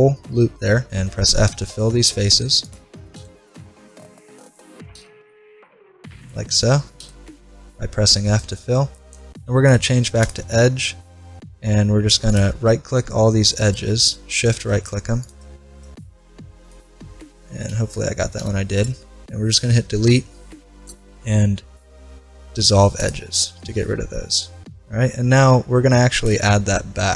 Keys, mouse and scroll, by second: 0.9 f, 1.4-2.6 middle drag, 2.6-3.7 right drag, 3.2 f, 4.9 f, 7.0 f, 7.1-8.1 right drag, 8.1-9.5 middle drag, 9.5 ctrl+Tab, 12.3-14.0 right drag, 17.7 z, 18.2 right click, 18.4 z, 20.1 Delete, 23.6 middle click, 26.2 ctrl+r.